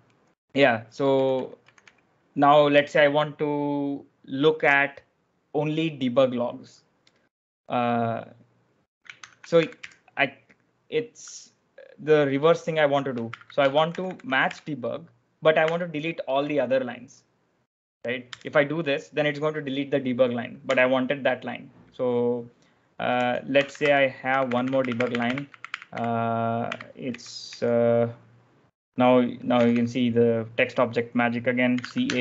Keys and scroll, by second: 1.0 k, 1.2 k, 1.5 k, 1.7 k, 8.9-10.3 typing, 12.9-15.5 typing, 18.3 Return, 20.5 u, 22.7-32.2 typing.